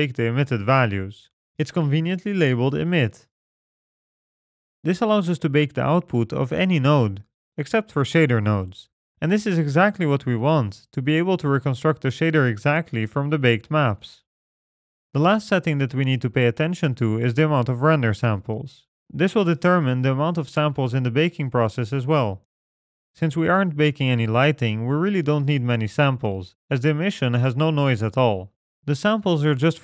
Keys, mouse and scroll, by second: 1.1 click, 4.9-5.6 scroll down 11, 5.6 middle click, 5.9-6.3 scroll down 1, 8.1-8.6 scroll up 11, 8.8 middle click, 9.1 scroll up 2, 16.1-17.6 scroll up 7.